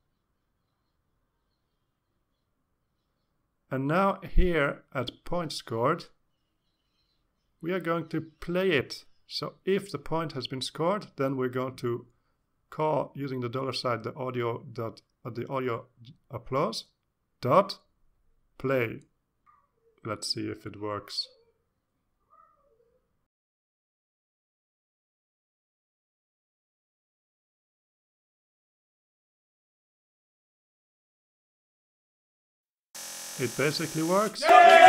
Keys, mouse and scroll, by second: 1.0 Left, 1.3 Right, 1.6 Right, 3.1 Left, 4.3 ctrl+shift+Right, 5.7-8.0 typing, 8.8 ctrl+s, 11.6 click, 13.3 ctrl+s, 16.9 Return, 19.2-21.0 typing, 21.8 Return, 22.8-25.2 typing, 25.8 ctrl+s, 27.6 click, 29.8 click, 30.7 click, 31.3 click.